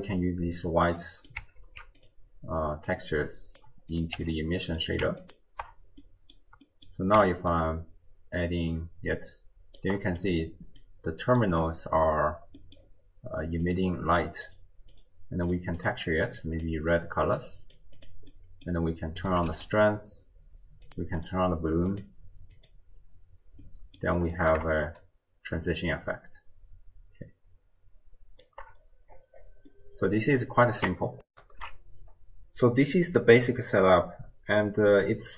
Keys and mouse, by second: 1.0-1.4 drag, 1.6 ctrl+x, 2.0 click, 3.0-3.6 drag, 3.9 click, 4.6 middle click, 6.0 middle click, 6.7 middle click, 7.5-9.8 shift+drag, 10.8 click, 10.8 d, 11.4 d, 12.0 d, 12.6 middle click, 13.6 click, 14.5 click, 15.0 click, 15.5 click, 15.8 click, 18.3 middle click, 19.2 click, 20.9 click, 21.2 drag, 21.9 click, 22.7 click, 23.7 middle click, 24.4 middle click, 25.0-28.5 shift+drag, 29.7 middle click, 31.3 ctrl+alt+shift+w, 31.4 ctrl+alt+shift+q.